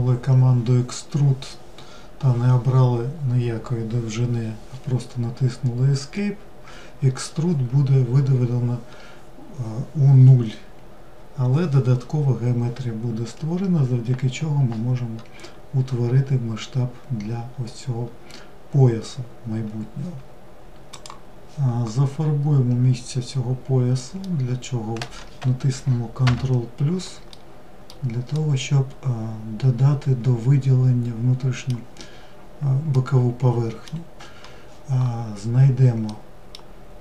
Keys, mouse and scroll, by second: 12.4-15.6 scroll up 2, 23.4-25.4 middle drag, 25.4 ctrl+KP_Add, 26.5-30.5 middle drag, 32.1-35.1 middle drag, 35.2-37.0 middle drag.